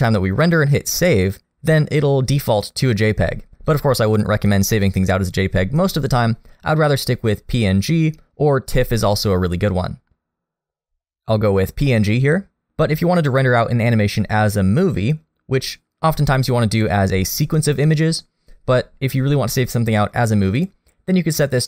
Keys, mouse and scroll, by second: 3.7 click, 20.6 click.